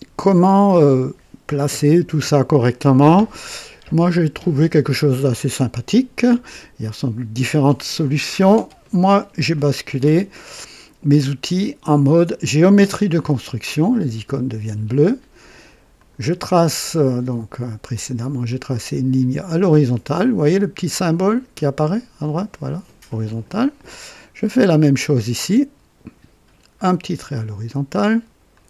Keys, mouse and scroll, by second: 3.1 scroll down 2, 12.5 click, 15.9 click, 18.4 click, 23.2 click, 26.7 click, 28.5 click.